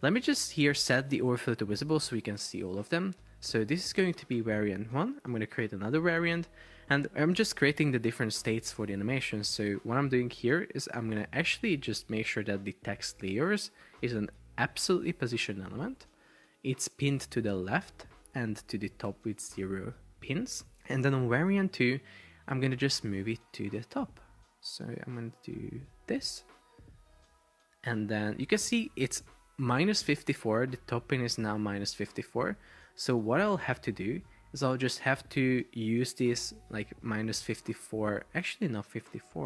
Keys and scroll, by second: 3.8 super+r, 4.4 Escape, 17.5 0, 18.2 Return, 19.3 0, 19.5 Return, 22.9 shift+Up, 24.7 Up, 25.2 Down, 25.6 Up, 26.4 Up, 26.9 Down, 32.8 super+c.